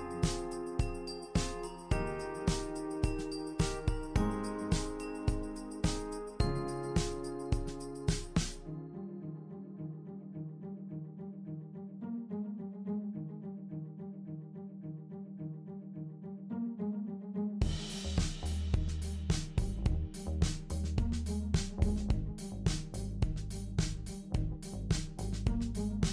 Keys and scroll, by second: 23.3 super+c, 23.4 super+v.